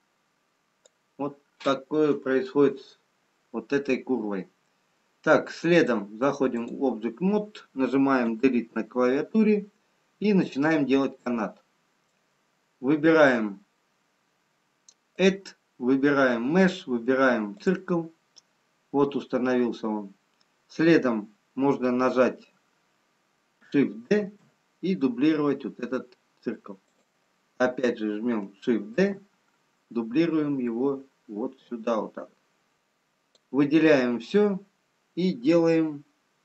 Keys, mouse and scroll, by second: 1.2 click, 2.7-3.7 scroll up 1, 3.7-4.1 scroll down 1, 8.3 Delete, 9.4-9.9 scroll down 1, 10.4 middle click, 10.4-11.1 scroll down 6, 15.1 click, 24.2 shift+d, 28.9 shift+d, 32.8 click.